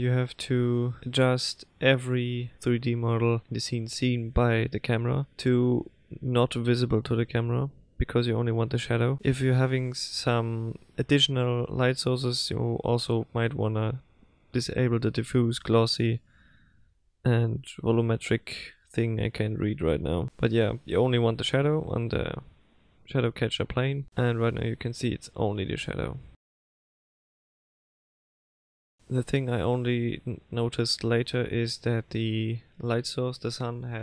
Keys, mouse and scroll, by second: 0.1 click, 1.0 click, 1.9 click, 2.7 click, 3.6 click, 4.4 click, 5.3 click, 6.2 click, 7.1 click, 8.1 click, 9.0 click, 9.7 click, 10.9 click, 11.9 click, 12.9 click, 13.6 click, 14.3 click, 15.0 click, 15.9 click, 16.7 click, 17.5 click, 18.3 click, 19.2 click, 19.9 click, 21.3 click, 28.9 click.